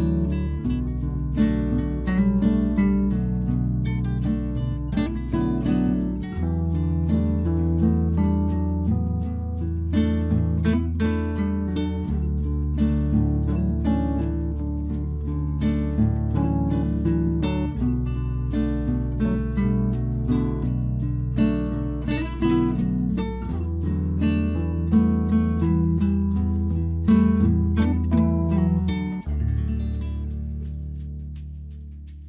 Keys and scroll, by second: 15.7 Delete.